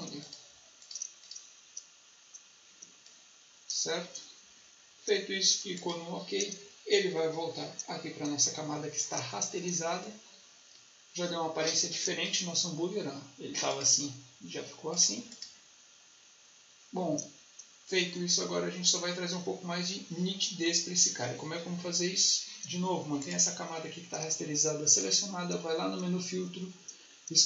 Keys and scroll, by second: 2.7 space.